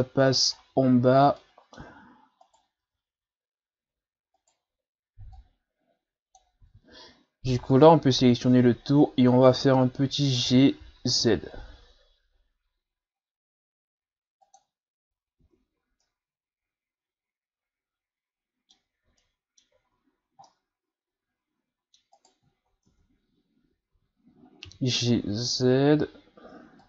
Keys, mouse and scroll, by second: 0.6 ctrl+scroll down 2, 0.9-1.4 scroll up 2, 1.4-2.4 middle drag, 2.4 right click, 2.8 Tab, 4.4 right click, 5.3-6.6 drag, 6.6 ctrl+z, 7.7 right click, 8.2 l, 9.2 scroll down 1, 10.5 g, 15.4 Tab, 15.8 a, 16.0-19.0 middle drag, 19.1 shift+scroll up 1, 19.2-19.9 middle drag, 19.9-20.3 shift+scroll up 4, 20.5-22.2 middle drag, 22.2 right click, 22.5 shift+scroll up 2, 22.9 Tab, 23.6 a, 23.9 a, 24.7 g.